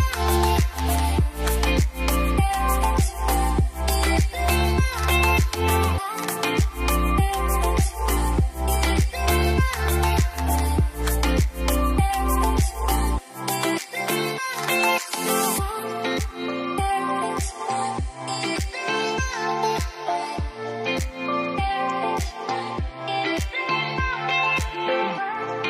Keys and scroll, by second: 2.8 5, 2.9 Return.